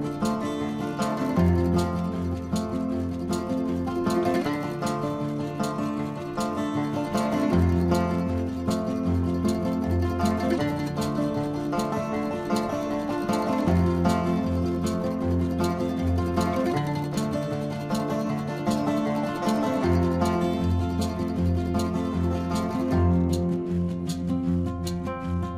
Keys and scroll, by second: 14.9 ], 17.3 ctrl+alt+z.